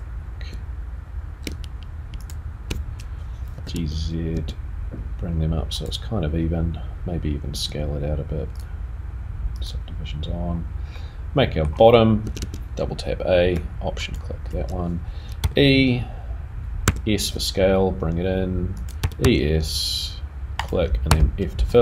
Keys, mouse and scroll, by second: 2.2 alt+shift+click, 3.5 g, 7.5 s, 9.6 click, 10.2-10.6 scroll down 2, 10.9 middle click, 12.2 a, 12.5 a, 14.1 alt+click, 17.2 e, 21.7 middle click, 21.7 e, 21.7 f.